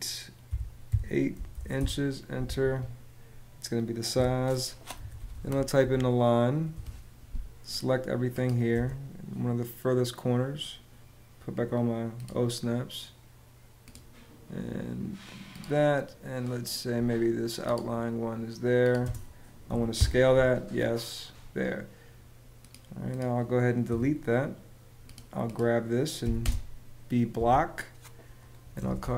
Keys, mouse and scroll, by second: 0.2 -, 0.6 8, 1.5 Return, 2.4 Escape, 4.5-6.1 typing, 6.4 Return, 8.4 space, 18.7 space, 19.7 Return, 23.6 BackSpace, 26.1 space, 28.3-29.1 typing.